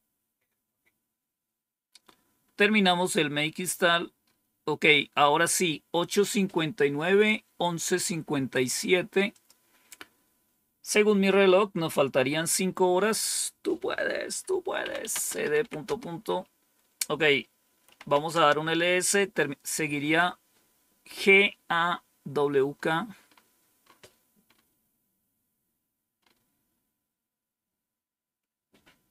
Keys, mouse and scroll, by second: 3.2-4.1 scroll down 1, 4.2-9.2 scroll up 1, 9.2 click, 13.1 click, 14.5-16.0 typing, 17.7-18.6 typing, 27.5-28.3 scroll down 2, 28.6 scroll up 2.